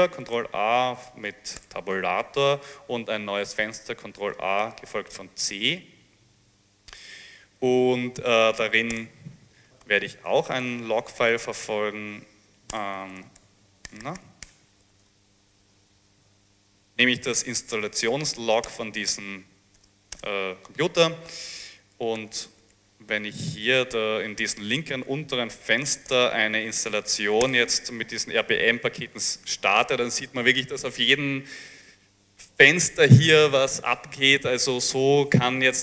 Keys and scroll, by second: 0.3 ctrl+a, 1.6 Tab, 4.3 a, 5.2 c, 8.1-16.5 typing, 18.7 Return, 19.1 Return, 19.8 Return, 20.2 Return, 22.3 ctrl+a, 22.7 Tab, 23.1 a, 23.4 Tab, 25.5-26.5 typing, 27.5 Up, 27.5 Return.